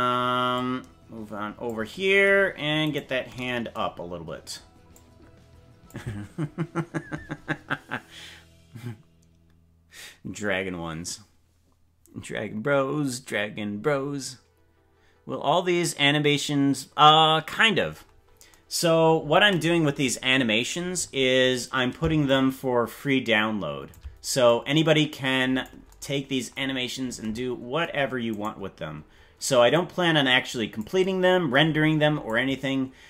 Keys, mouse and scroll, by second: 0.5-1.7 drag, 3.1 right click, 4.9 click, 22.2-23.9 shift+drag, 24.4-25.6 drag, 28.6 right click, 29.7-30.8 drag, 32.2-33.0 drag.